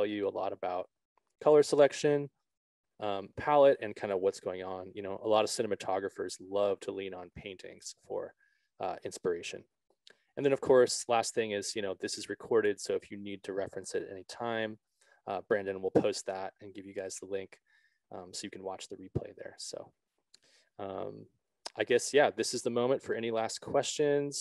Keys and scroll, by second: 20.0 Right, 20.6 Left.